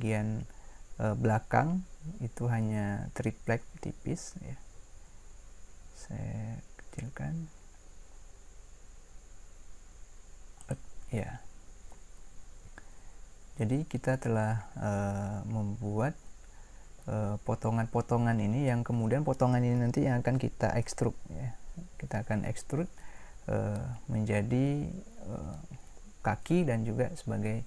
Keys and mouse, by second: 12.2-27.6 middle drag.